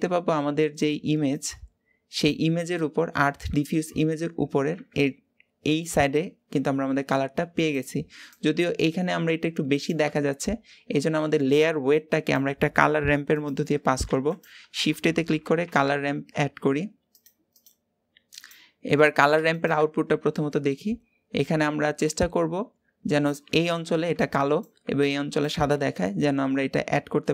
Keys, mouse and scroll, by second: 1.2-4.2 drag, 4.2-10.2 scroll up 1, 10.2-10.7 scroll down 1, 11.8-13.2 drag, 18.2-19.4 drag, 20.5 scroll up 1, 21.5-27.3 drag.